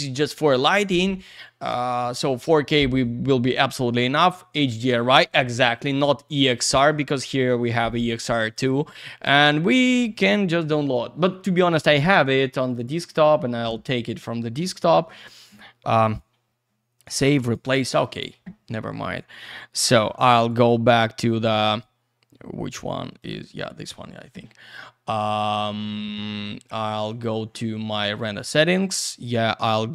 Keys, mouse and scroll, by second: 6.2 click, 8.4 click, 9.7 click, 18.0 click, 20.4 click, 23.5 click, 27.1 click, 29.1 click.